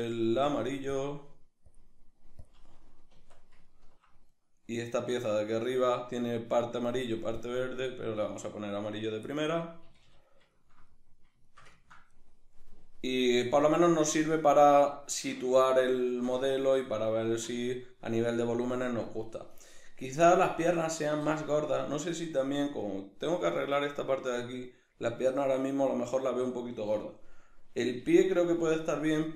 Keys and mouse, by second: 0.3-3.7 drag, 3.2 Tab, 3.7-4.3 ctrl+middle drag, 4.3 right click, 7.4 click, 9.4-22.4 middle drag, 9.9 a, 22.4 right click, 28.1-29.3 shift+middle drag.